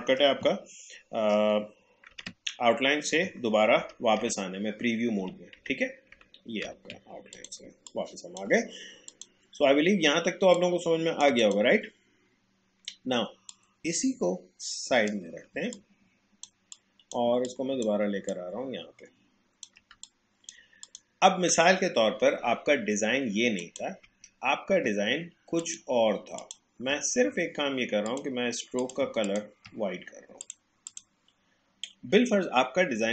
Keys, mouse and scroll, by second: 2.1 ctrl+y, 3.8 ctrl+y, 7.3 click, 7.6 space, 7.9 click, 8.1 space, 9.1-15.5 drag, 15.5 space, 15.7-18.3 drag, 18.3-19.9 alt+drag, 19.9 space, 20.1 click, 20.5 space, 20.8 click, 23.6 click, 25.5 shift+click, 29.2 shift+click, 30.4 click.